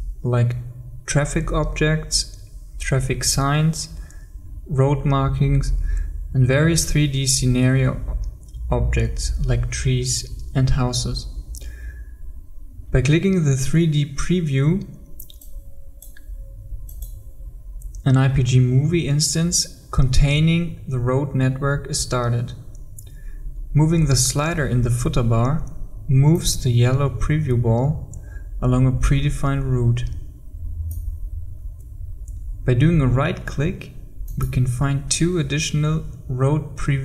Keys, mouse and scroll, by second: 12.2-15.1 scroll down 1, 15.5 click, 34.4 right click.